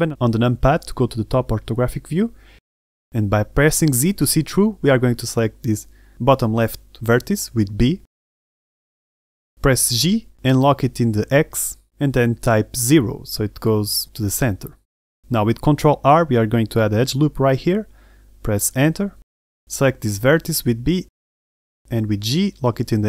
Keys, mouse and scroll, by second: 0.1 Tab, 0.6 middle click, 1.7 KP_7, 2.7-4.5 scroll down 3, 5.3 shift+middle click, 7.3 z, 8.4 a, 8.8 a, 9.0 b, 10.6 g, 14.9 shift+middle click, 16.1-16.6 scroll up 1, 17.2 ctrl+r, 20.8 a, 21.2 b.